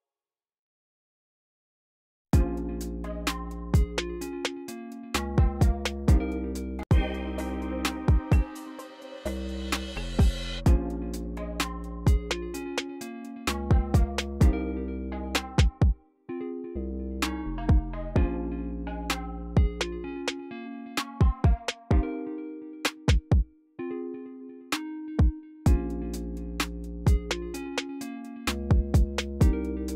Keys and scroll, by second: 0.6 ctrl+super+x, 0.9 c, 2.0-2.9 typing, 7.3 c, 12.8 super+w, 13.3-14.1 typing, 22.8 typing, 24.5-25.3 typing.